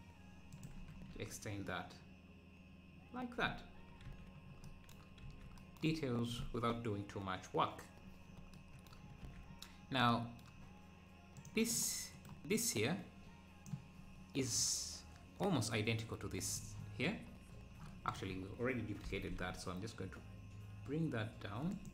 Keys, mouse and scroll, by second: 0.8 Tab, 1.0 scroll down 1, 5.6 scroll down 2, 8.0-8.4 scroll up 2, 9.8-10.1 scroll down 1, 11.5 click, 15.4-17.3 drag, 17.3-18.2 scroll down 2, 18.2 click, 19.1 g.